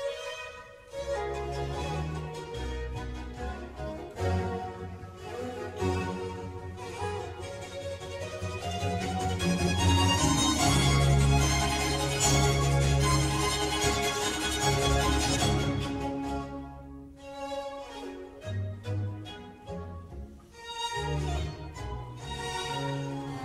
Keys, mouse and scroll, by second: 0.7 e, 7.8 scroll down 1, 8.0-8.3 scroll up 1, 8.3 middle click, 9.2 click, 9.6 middle click, 10.3 e, 17.8-19.9 middle drag, 19.9 s, 21.9-23.4 middle drag.